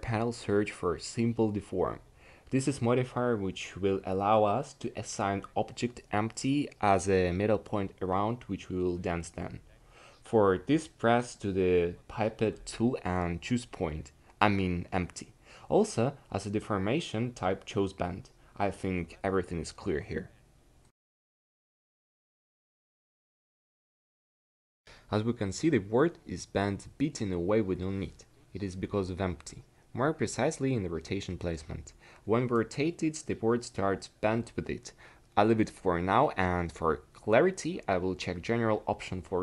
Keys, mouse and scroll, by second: 29.9-31.6 drag, 31.6 r, 36.8 n.